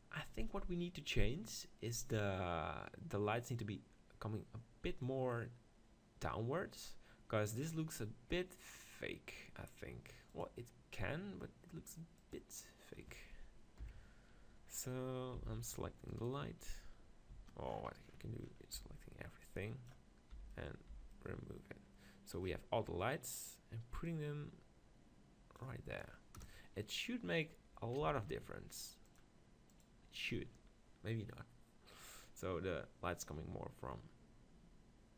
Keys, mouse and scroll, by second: 10.9-12.5 drag, 13.8 KP_1, 14.5-16.1 middle drag, 15.4 z, 16.1-18.0 right drag, 17.7 click, 18.0-20.2 middle drag, 18.8 b, 20.3 b, 20.9 b, 22.9-24.1 middle drag, 24.1-25.9 drag, 26.4 KP_0, 28.1 z, 29.1-30.8 drag.